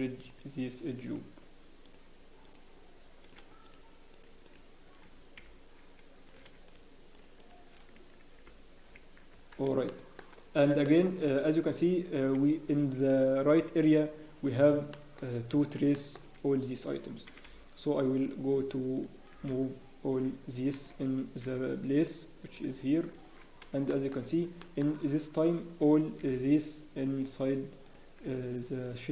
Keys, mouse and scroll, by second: 1.8 click, 3.6 shift+click, 5.3 f, 6.5 click, 6.6 shift+click, 7.7 shift+click, 8.4 f, 8.8-9.7 scroll down 5, 8.9 Tab, 9.3-9.8 scroll up 2, 9.7 Tab, 9.8 shift+middle click, 10.4 scroll down 1, 10.8 shift+middle click, 11.1 scroll down 1, 11.6 z, 12.4 Escape, 14.8 click, 14.9 shift+middle click, 15.4 scroll up 1, 15.9 shift+middle click, 16.2 scroll up 1, 17.2-18.4 scroll up 3, 17.2 g, 18.9 click, 19.3 g, 22.0 g, 22.4 click, 22.6 g, 23.3 scroll down 1, 23.9 shift+middle click, 24.2 scroll up 1, 24.6 shift+middle click, 24.6 scroll down 5, 24.9-25.3 scroll, 25.3 click, 25.3-26.2 scroll up 4, 26.2 g, 27.8 click, 28.1 g.